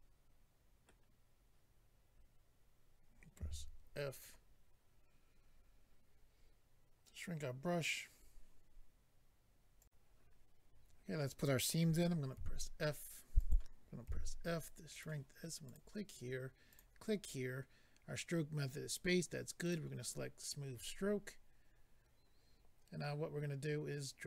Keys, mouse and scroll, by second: 4.1 click, 4.1 f, 4.2 click, 9.8 click, 9.8 click, 13.4 click, 13.4 f, 14.0 f, 14.9 click, 15.6 click, 16.7 click, 16.8 click, 19.6 click, 19.7 click, 21.9-23.1 scroll down 1.